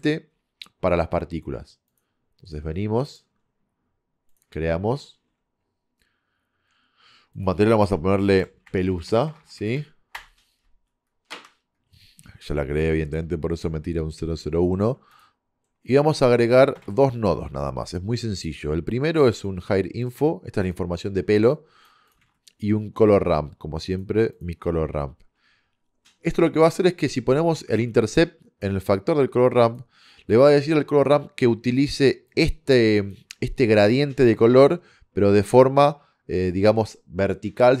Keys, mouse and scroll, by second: 9.4 BackSpace, 15.2-16.8 drag, 16.8 shift+a, 21.6 click, 22.2 shift+a, 25.6 middle click, 27.4-31.5 drag, 32.3 click.